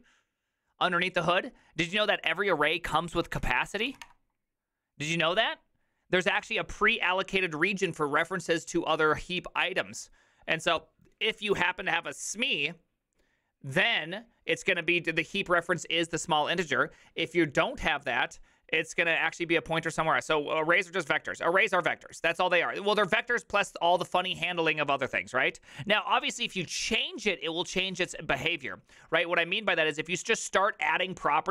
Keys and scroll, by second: 3.9 typing, 4.0 Return.